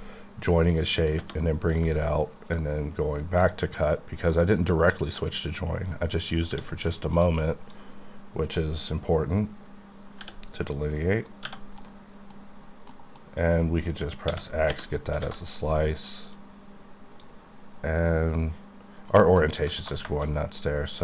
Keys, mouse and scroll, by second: 2.5 ctrl+click, 4.3 click, 6.5 d, 7.1 d, 7.5 click, 7.8 click, 10.2 b, 10.9 b, 11.8 middle click, 12.6 scroll up 2, 12.9 middle click, 14.3 x, 15.2 a, 15.5 click, 16.4 click, 19.1 right click, 19.4 middle click, 20.3-21.0 scroll up 1.